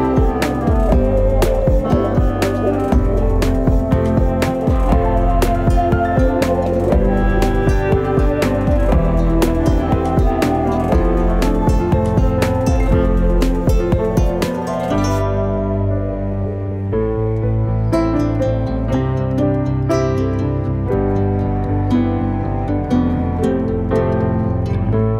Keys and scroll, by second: 9.7 5, 10.4 Return, 12.1 typing, 13.4-14.3 typing, 16.0-17.6 typing.